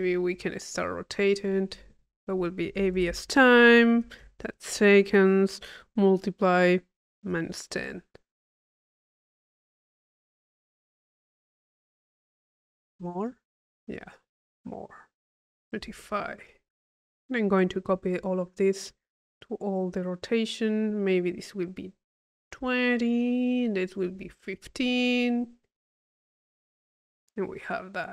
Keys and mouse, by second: 2.1 click, 9.6 click, 14.7 click, 17.1 click, 18.7 click, 19.5 click, 21.0 click, 23.5 click, 25.0 click, 27.6-28.1 middle drag.